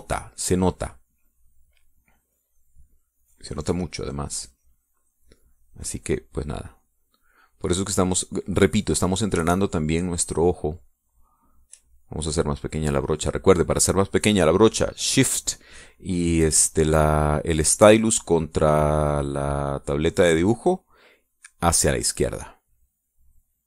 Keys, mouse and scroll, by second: 10.7-13.0 shift+drag, 13.8-15.9 drag, 18.2-21.8 drag.